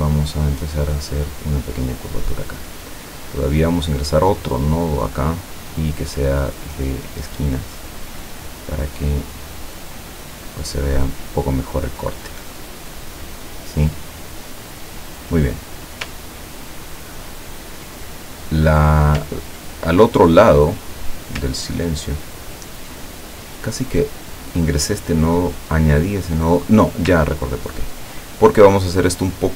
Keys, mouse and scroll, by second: 0.9-3.4 drag, 4.5 click, 7.1 click, 8.6-9.8 drag, 10.6-11.8 drag, 13.4-14.2 scroll up 4, 15.6-16.0 scroll down 2, 16.5 ctrl+scroll down 2, 20.2 middle click, 21.7 ctrl+scroll down 2, 22.3 ctrl+scroll up 2, 23.9 click, 27.3-27.8 ctrl+scroll up 2, 29.4-29.5 drag.